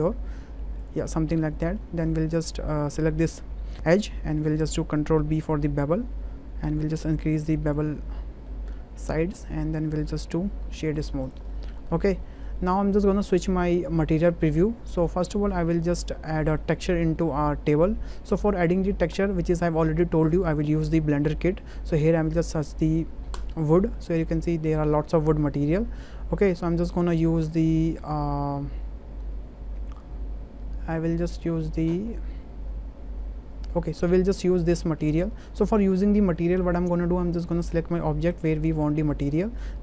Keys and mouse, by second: 0.8 click, 1.6 shift+click, 2.3 click, 4.7 ctrl+b, 6.7 click, 7.9 Tab, 8.5-9.1 middle drag, 9.3 click, 10.5-11.5 right drag, 11.9 shift+middle drag, 12.2 middle click, 12.6 shift+middle click, 14.3 click, 15.1 shift+middle click, 15.4 middle drag, 15.8 shift+middle click, 16.4 shift+middle drag, 16.7 middle drag, 17.2 shift+middle drag, 18.3 shift+middle drag, 37.6-38.4 drag, 39.3 middle click.